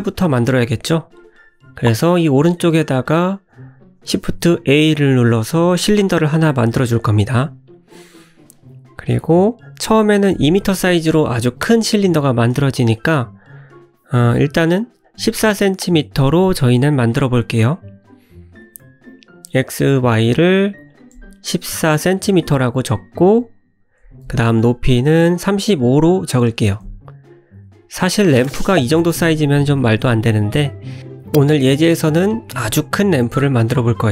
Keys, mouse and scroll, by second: 0.5 shift+right click, 1.7 shift+a, 5.7 scroll down 2, 7.3 scroll down 6, 7.3 s, 9.9-10.3 scroll up 7, 11.1 click, 12.0 n, 14.6 click, 15.6 click, 19.5 click, 21.3 click, 22.2 click, 24.3 click, 26.7 click, 27.2 middle click, 28.1 click.